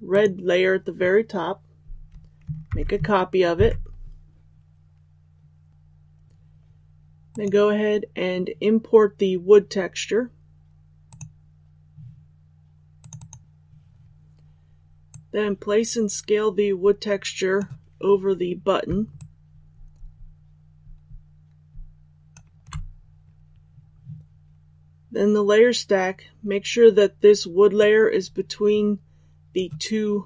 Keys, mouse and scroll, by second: 2.6 ctrl+c, 7.2 click, 13.4 ctrl+z, 15.0-17.7 drag, 19.1-29.7 alt+shift+drag.